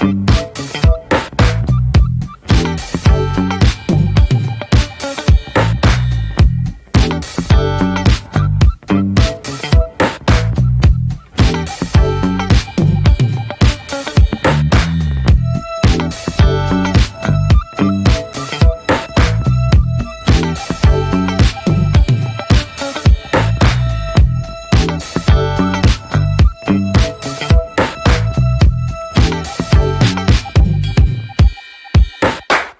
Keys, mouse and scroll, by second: 0.1 scroll down 3, 0.3 shift+middle click, 0.5 scroll up 1, 0.7 click, 1.2 shift+middle click, 1.8 click, 2.1 shift+middle click, 2.3 scroll down 1, 2.4 middle click, 2.8 click, 3.1 scroll down 1, 3.2 middle click, 3.3-3.7 scroll up 1, 3.7 ctrl+z, 3.9 click, 4.2 middle click, 4.5 scroll down 3, 4.7 shift+middle click, 5.2 ctrl+z, 5.3 scroll up 2, 5.5 click, 6.3-7.5 shift+middle drag, 6.5-7.2 scroll up 4, 7.5 click, 7.8 middle click, 8.1-9.1 drag, 9.1 middle click, 9.5 click, 9.8 middle click, 10.1 click, 10.6 middle click, 10.9 click, 11.3 shift+middle click, 11.7 click, 12.1 middle click, 12.4 click, 12.8 middle click, 13.1 click, 13.7 middle click, 14.0 click, 14.3-14.9 scroll down 2, 14.4 middle click, 14.7 click, 14.9 shift+middle click, 15.4 scroll up 1, 15.5 click, 15.9 shift+middle click, 16.3 scroll up 2, 16.4 shift+middle click, 16.6-17.9 drag, 17.9 shift+middle click, 18.3-19.9 drag, 19.9 middle click, 20.2 f, 20.5 click, 21.4 shift+middle click, 21.7 click, 22.2 middle click, 22.4 click, 23.3 middle click, 23.5 click, 24.1 scroll down 1, 24.2 middle click, 24.4 click, 25.1 middle click, 25.6-26.7 drag, 26.7 shift+middle click, 27.2 ctrl+z, 27.4 shift+middle click, 27.8 click, 28.6 middle click, 28.8 ctrl+z, 29.1 click, 30.1 middle click, 30.6 click, 31.2 middle click, 31.5 click, 31.8 middle click, 32.1 click, 32.5 middle click.